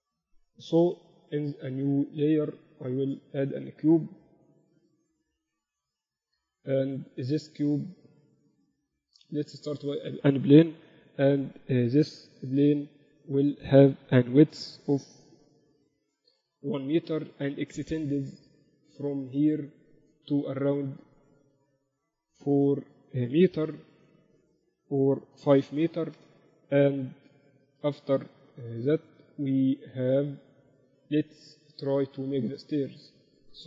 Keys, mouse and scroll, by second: 1.3 KP_1, 2.1-4.1 drag, 5.9 ctrl+Up, 6.5 shift+a, 13.1 KP_7, 15.4 s, 18.1 Tab, 19.3 click, 21.7 g, 31.0 KP_1.